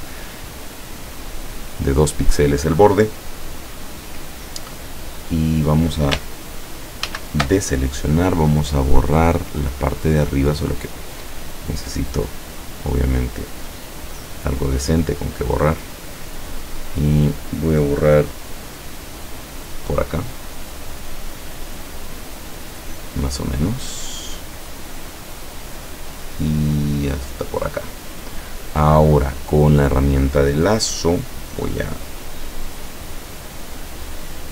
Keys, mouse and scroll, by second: 0.6 click, 1.6 click, 7.1 ctrl+shift+a, 8.5 click, 10.5 click, 12.1 click, 14.2-16.1 drag, 19.3 click, 20.8 click, 26.0-28.1 drag, 29.6 click.